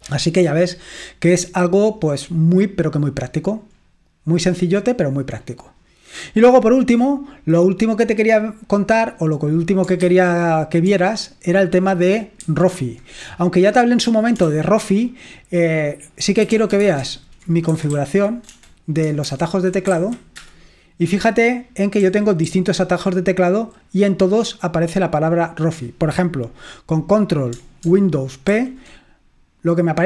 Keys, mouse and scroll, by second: 4.2-4.5 scroll up 2, 4.5-5.3 scroll down 2, 5.3-7.0 scroll down 3, 8.7 click, 10.2 super+1, 12.6 super+7, 14.5 ctrl+l, 16.4-20.4 typing, 22.1-24.4 typing, 28.7 ctrl+super+p.